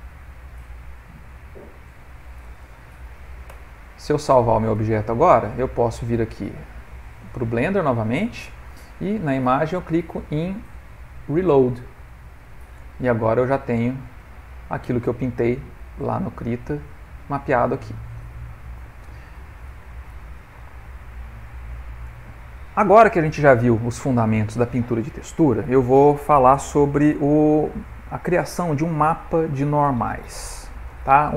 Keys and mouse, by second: 10.9 click, 13.8 middle click, 14.4 ctrl+middle click, 14.9 middle click, 15.5 shift+middle click, 15.9 middle click, 16.5 ctrl+middle click, 17.2 middle click, 18.7 ctrl+middle click, 19.3 shift+middle click, 20.0 ctrl+middle click, 20.7 middle click, 23.4 middle click, 24.0 ctrl+middle click, 24.1 ctrl+middle click.